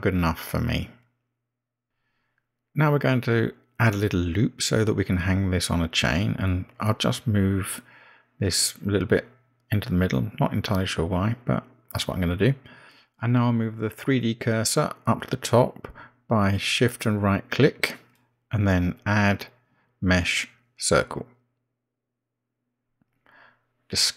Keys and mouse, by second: 6.4 click, 13.4 g, 18.8 shift+right click, 21.5-24.1 drag.